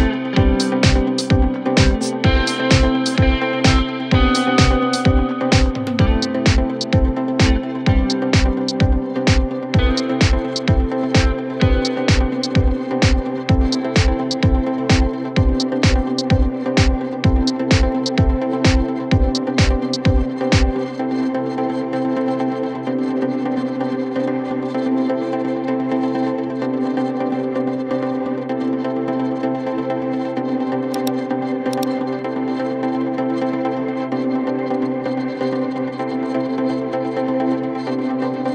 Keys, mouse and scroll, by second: 7.6 Return, 30.4 ctrl+t.